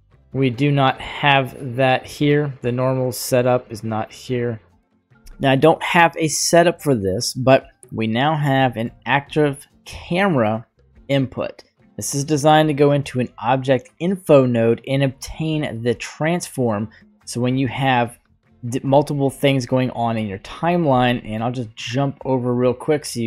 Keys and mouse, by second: 1.1 click, 3.7 click, 7.9 click, 8.7 middle click, 10.0-12.0 drag, 12.7-15.1 drag, 15.6-17.8 drag.